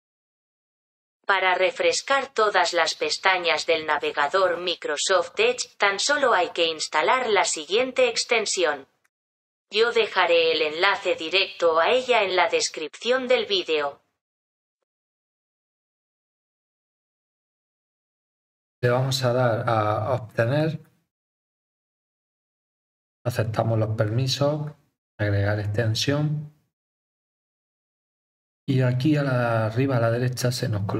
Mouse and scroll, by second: 0.8 click, 9.0 click, 20.6 click, 24.1 click.